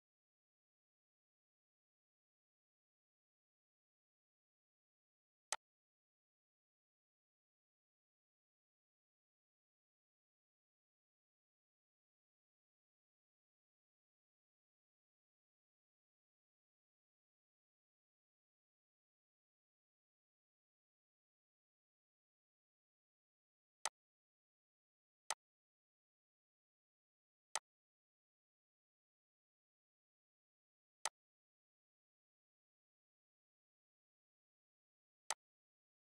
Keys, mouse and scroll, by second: 5.5-15.5 drag, 5.5 typing, 21.6 click, 23.8 click, 24.3 right click, 25.6 click, 27.6-35.3 drag, 35.3-36.0 alt+drag.